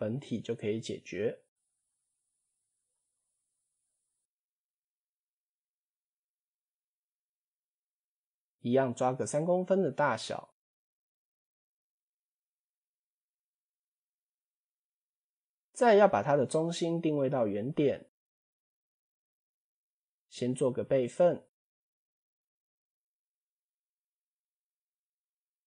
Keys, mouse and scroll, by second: 1.3 s, 3.2 scroll down 3, 3.7 s, 9.7 scroll down 2, 12.6 ctrl+a, 20.8 shift+d, 22.6-23.3 drag, 23.6-24.5 drag.